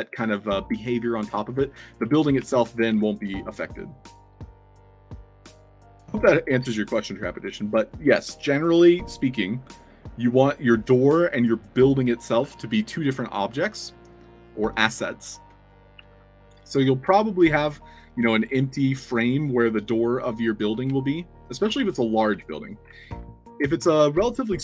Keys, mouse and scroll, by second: 0.0-3.5 typing, 4.3 alt+click, 4.7 click, 13.8 click, 15.2-16.4 typing, 20.9-21.5 alt+drag, 21.7 space, 21.8 s, 22.4 alt+drag, 22.9 middle click, 22.9 w.